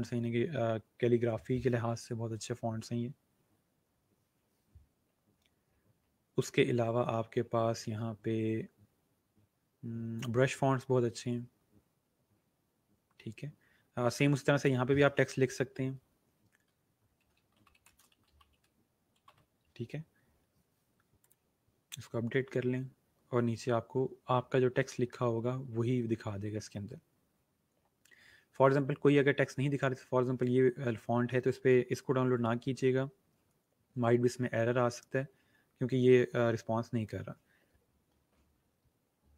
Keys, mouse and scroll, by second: 1.8 scroll down 1, 4.2 scroll down 1, 5.0 scroll up 1, 10.1 click, 11.1 scroll down 1, 12.9 scroll up 1, 14.5 click, 16.8-19.8 typing, 21.1 click, 23.1 scroll down 1, 24.2 scroll up 1, 24.8 scroll down 1, 28.2 scroll up 1, 35.5 scroll up 1.